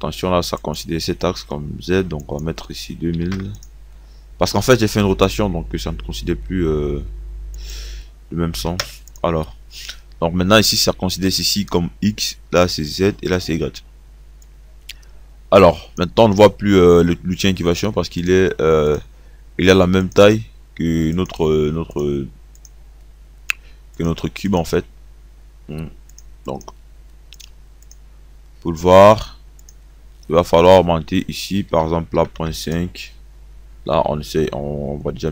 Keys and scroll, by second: 3.1 KP_2, 3.3 KP_0, 8.2 5, 8.8 0, 31.3 Right, 31.9 KP_Decimal, 32.2 KP_5.